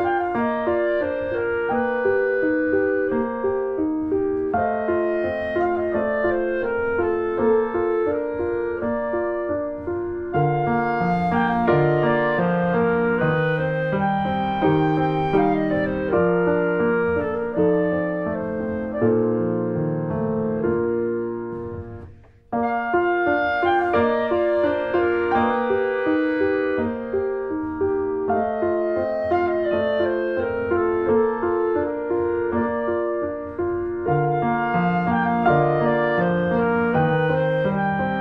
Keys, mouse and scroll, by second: 0.1-0.4 scroll up 1, 0.4 click, 1.5 click, 1.8 click, 2.3 ctrl+z, 2.5 click, 3.1 click, 3.4 click, 3.6-4.1 scroll up 1, 4.1 click, 4.7-6.9 drag, 6.9-8.4 middle drag, 8.4 ctrl+s, 8.6 shift+middle click, 9.5 click, 9.7 shift+middle click, 10.6 ctrl+shift+b, 12.4 click, 12.8 alt+middle click, 13.5 shift+middle click, 13.6-14.1 shift+scroll up 1, 14.1 click, 14.6-15.0 scroll up 1, 15.0 click, 15.8 shift+middle click, 16.2 click, 16.5 click, 18.3 click, 18.5 click, 19.5 middle click, 19.6 scroll up 1, 19.9 shift+middle click, 20.3 click, 20.5 scroll down 2, 20.7 shift+middle click, 20.9 shift+scroll up 1, 21.0 middle click, 21.5 click, 22.4 scroll up 1, 22.6 middle click, 23.1 shift+click, 24.0 ctrl+z, 24.2 click, 24.7 middle click, 25.6 click, 26.3 3, 26.6 click, 27.6 x, 28.2 scroll down 1, 28.3 middle click, 28.8 ctrl+s, 29.0 click, 29.1 scroll down 1, 29.2 shift+middle click, 29.9 ctrl+s, 30.1 click, 30.2 Tab, 30.4 middle click, 30.9 click, 31.0 scroll down 2, 31.2 middle click, 32.1 ctrl+s, 32.3 click, 32.4 Tab, 32.5 middle click, 32.7-33.7 scroll up 2, 32.8 shift+middle click, 33.7 click, 34.0 Tab, 34.2 click, 34.4 Tab, 34.6 click, 35.7 2, 36.0 click, 36.4 1, 36.5 click, 37.2 alt+middle click, 37.8-38.2 scroll up 1.